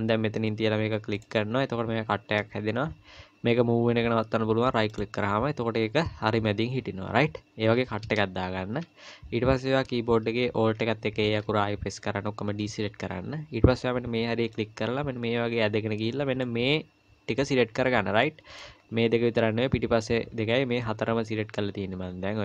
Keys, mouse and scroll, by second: 11.3 alt+a, 14.5 click, 18.2 middle click, 18.8-21.2 scroll down 1, 21.5 middle click.